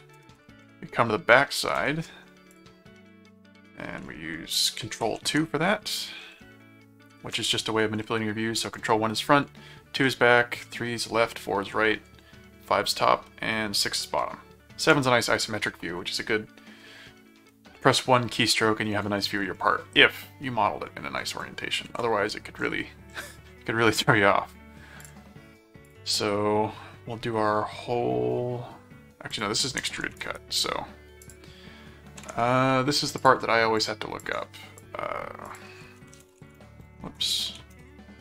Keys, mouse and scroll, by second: 0.0-1.1 typing, 1.8 Return, 2.5 click, 5.0 ctrl+2, 7.8 ctrl+1, 9.3 ctrl+2, 10.0 ctrl+3, 11.1 ctrl+4, 11.7 ctrl+5, 12.8 ctrl+6, 14.2 ctrl+7, 21.8 ctrl+2, 25.0 click, 25.8 click, 29.3 click, 30.2 right click, 31.2 click, 33.2 click, 33.8 click, 35.5 click, 35.8-37.1 typing, 37.5 ctrl+shift+a, 37.7 ctrl+BackSpace.